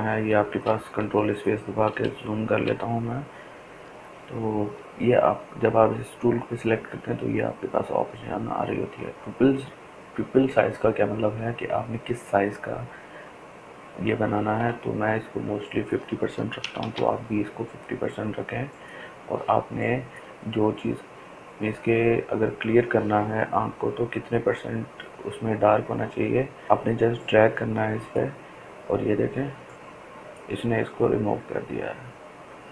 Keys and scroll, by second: 15.8-16.7 typing.